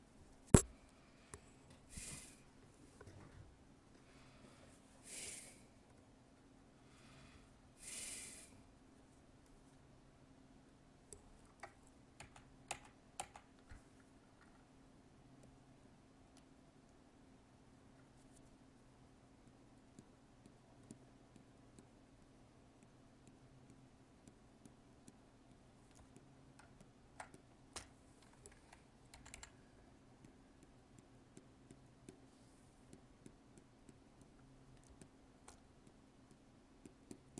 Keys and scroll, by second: 12.1 ctrl+z, 26.6 alt+space.